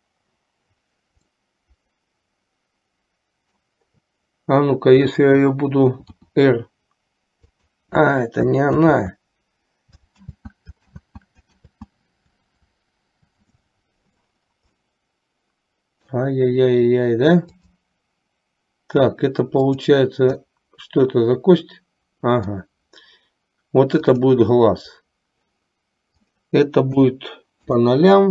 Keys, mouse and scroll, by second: 1.4 scroll up 1, 1.5-3.9 middle drag, 6.1 r, 9.0 ctrl+z, 10.4 ctrl+z, 11.1 ctrl+z, 11.9 ctrl+z, 14.9-16.4 middle drag, 19.7 click, 20.6-22.9 middle drag, 24.2-24.7 drag, 26.2-28.1 drag.